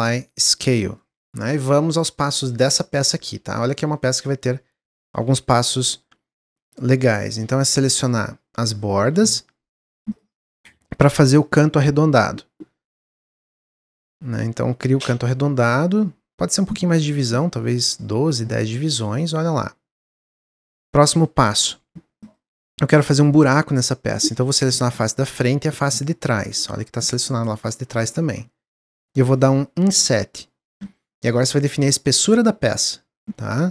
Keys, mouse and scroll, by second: 1.4 Tab, 2.4-4.3 middle drag, 4.3 Tab, 4.6 Tab, 5.2 2, 5.8 click, 6.2 middle click, 7.1 shift+click, 7.4-8.7 middle drag, 8.7 shift+click, 9.2 middle click, 10.0 shift+click, 10.4-11.5 middle drag, 11.5 ctrl+b, 15.0-16.2 middle drag, 16.2-18.6 drag, 18.6-21.7 middle drag, 21.9 3, 22.1 click, 23.0-24.0 middle drag, 24.0 shift+click, 24.5-27.1 middle drag, 27.1 click, 27.9 ctrl+z, 28.2-29.6 middle drag, 29.6 i.